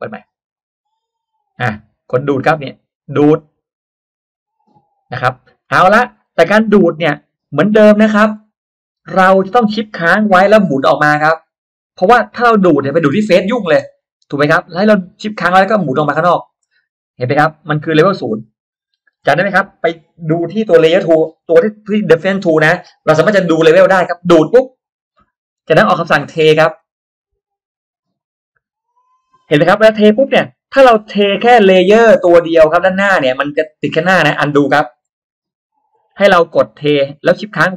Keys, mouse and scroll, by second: 0.5 click, 2.9 click, 3.7 middle click, 5.6 middle click, 8.0 middle click, 11.2-11.9 shift+scroll down 4, 13.3 scroll up 2, 14.0-14.3 shift+scroll up 2, 15.9-16.6 shift+scroll down 2, 17.1 scroll down 2, 24.9 click, 26.7 click, 28.1 click, 29.5-30.3 scroll up 3, 30.3-31.0 scroll down 1, 30.6 middle click, 31.0 scroll up 2, 35.7 ctrl+z, 36.9 click.